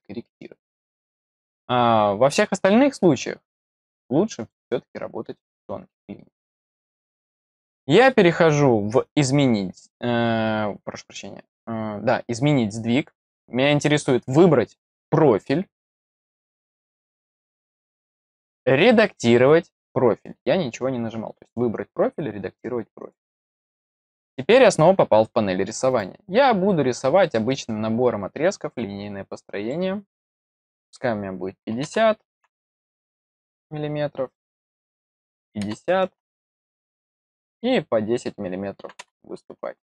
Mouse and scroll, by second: 3.4 click, 4.3 click, 5.3 middle click, 9.0 click, 15.8 click, 22.9 click, 25.8 click, 29.5 click, 34.2 click.